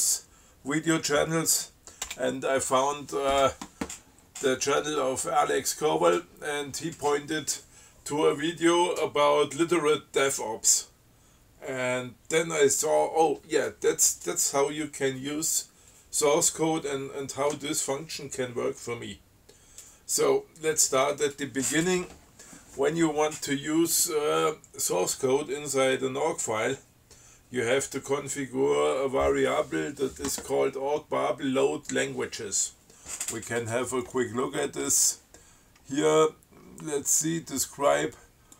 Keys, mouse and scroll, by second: 2.3 space, 34.3 click, 35.1 click.